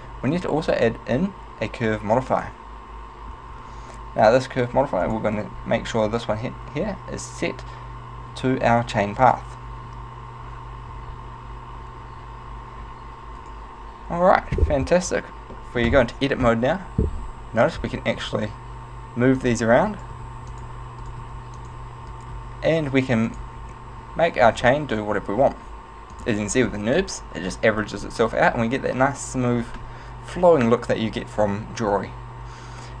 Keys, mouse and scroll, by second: 0.8 click, 5.1 click, 13.5 right click, 14.5-15.2 scroll down 5, 15.2 Tab, 15.6 middle click, 16.5 KP_7, 18.1 right click, 18.3 g, 19.5 click, 20.0 right click, 20.2 g, 20.7 click, 21.1 right click, 21.3 g, 21.8 click, 22.1 right click, 22.4 g, 23.5 click, 24.5 right click, 24.9 g, 26.3 click.